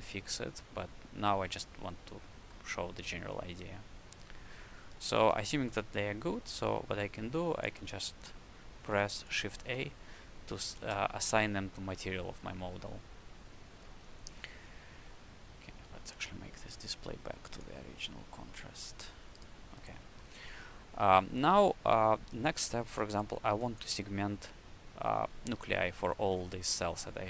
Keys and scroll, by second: 9.5 shift+a, 10.7 ctrl+space, 20.9 q.